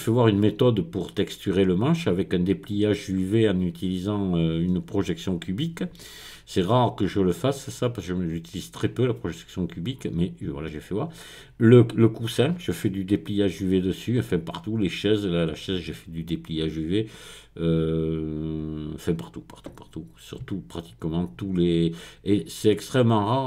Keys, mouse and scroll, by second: 13.9-14.8 scroll down 2, 16.3-17.0 scroll down 1, 17.1-18.0 scroll up 3, 20.7-21.5 scroll down 3, 21.6-22.3 scroll up 1, 22.3-23.4 scroll down 2.